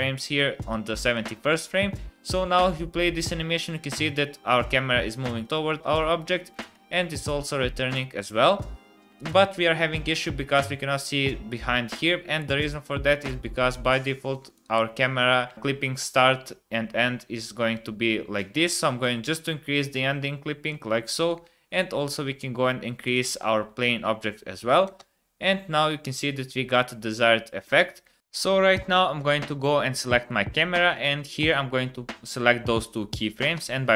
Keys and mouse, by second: 0.7 click, 1.9 space, 5.9 space, 6.9 space, 8.5 space, 12.4 KP_0, 19.0-20.7 drag, 21.9 s, 25.0 space, 30.1 click, 31.4 click, 33.5 t.